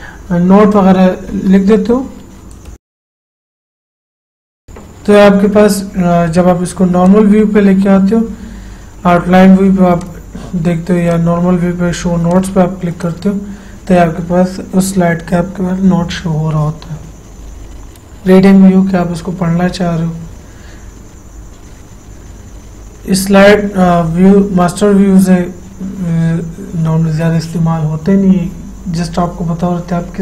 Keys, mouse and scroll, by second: 2.7-4.7 typing, 6.2-6.9 typing, 7.3 click, 10.3 click, 10.3 click, 18.8 click.